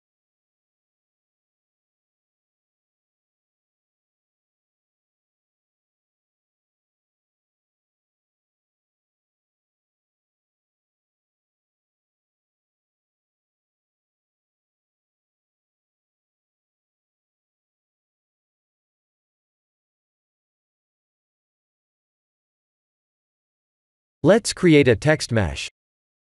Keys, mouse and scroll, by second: 0.4 click, 0.8 middle click, 8.4 click, 10.0 middle click, 11.4 click, 12.3 click, 14.3 click, 16.2 click, 19.2 click, 20.0 click, 23.1 click, 23.2 middle click, 23.2 h, 23.8 KP_1, 23.9 click, 24.3 shift+a.